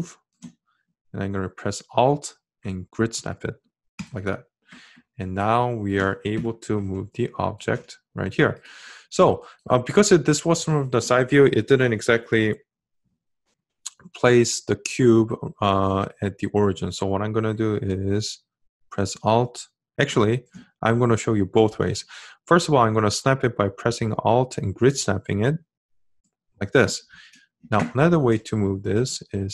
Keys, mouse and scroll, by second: 1.6-5.0 alt+drag, 22.9 alt+click.